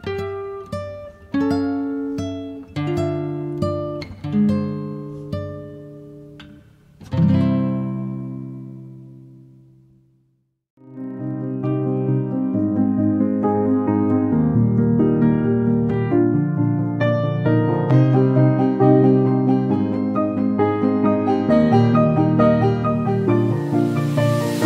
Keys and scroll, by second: 1.6 space, 3.3 f, 6.0 0, 6.3 KP_Decimal, 6.6 5, 7.5 Return, 10.3 0, 10.6 KP_Decimal, 10.9 5, 11.9 space, 13.6 e, 16.2 e, 16.9 p, 17.8 2, 18.2 Return, 20.4 space, 23.6 b.